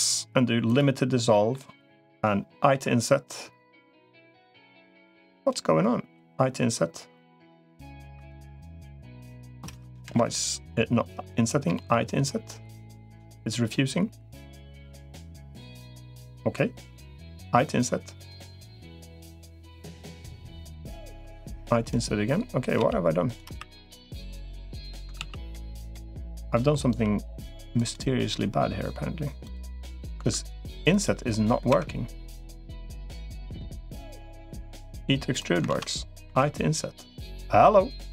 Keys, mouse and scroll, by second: 1.1 middle click, 2.6 i, 6.0 i, 7.8 3, 8.4 middle click, 9.8 KP_Decimal, 11.6 i, 20.8 middle click, 22.6 g, 23.4 3, 23.6 click, 25.0 ctrl+s, 26.8 i, 30.0 3, 31.6 Escape, 34.8 e, 35.6 ctrl+z, 36.2 i.